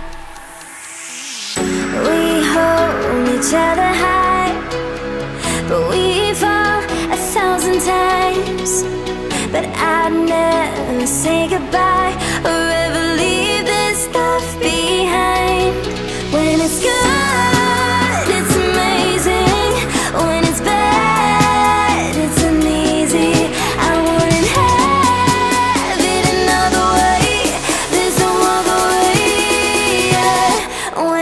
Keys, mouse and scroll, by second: 5.2 Down, 6.3 Up, 11.9 ctrl+Num_Lock, 11.9 click, 12.5 ctrl+r, 13.2 right click, 14.7 click, 22.2 Down, 23.2 Up, 27.8 click.